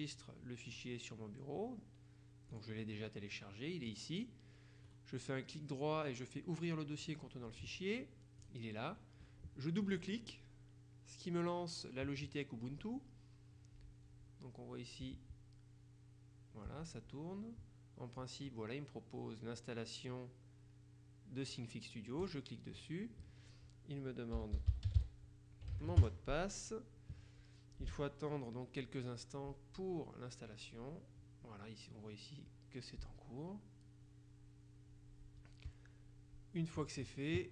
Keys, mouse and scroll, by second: 2.6 click, 4.0 click, 5.0 right click, 7.1 click, 8.5 click, 9.9 click, 22.3 click, 24.2-25.9 typing, 26.0 KP_Enter.